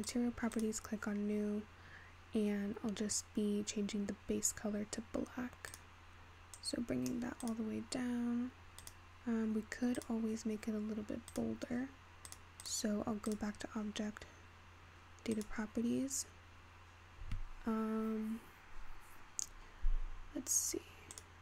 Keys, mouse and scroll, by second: 0.2-4.3 drag, 5.1-5.7 scroll down 1, 5.7 scroll down 1, 5.7 click, 7.5 click, 8.9 click, 10.1 click, 11.3 click, 12.3 click, 13.3 drag, 15.3-16.1 drag, 16.1-17.7 scroll down 2, 19.7-21.1 scroll down 4, 21.1 click.